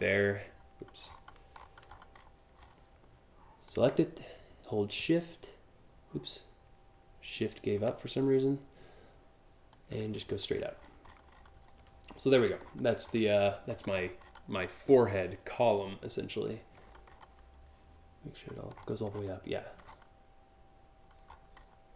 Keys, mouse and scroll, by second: 0.7-1.3 alt+scroll down 2, 1.5-2.4 scroll up 4, 3.3-9.4 shift+drag, 9.8-11.1 scroll up 7, 11.7-12.2 scroll up 2, 12.4-12.8 alt+scroll down 6, 13.1-14.6 alt+scroll up 7, 16.4 alt+click, 16.7 alt+click, 18.4 alt+scroll up 1, 18.8 alt+scroll down 1, 19.5 alt+scroll down 1, 20.9-21.4 alt+scroll up 2.